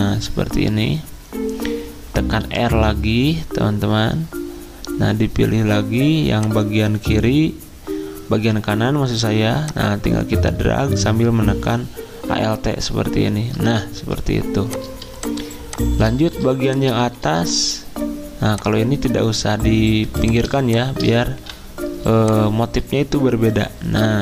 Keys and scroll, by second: 2.4 r, 13.9 z, 21.4 v, 22.7 typing.